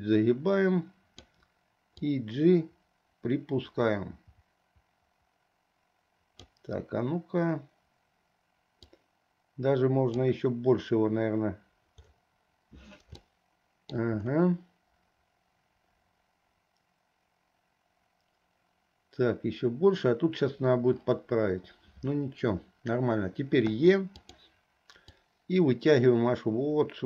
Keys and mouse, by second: 2.1-6.7 drag, 8.9-10.3 drag, 13.4 shift+middle click, 23.8 e, 25.4-27.0 drag.